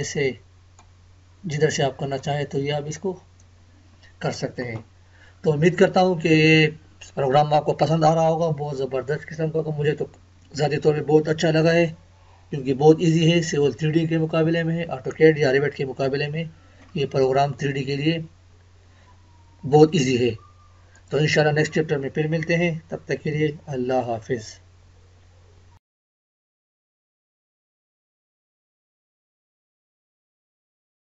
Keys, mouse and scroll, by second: 5.6-5.9 scroll down 1, 8.1-8.4 scroll up 1, 21.0 click.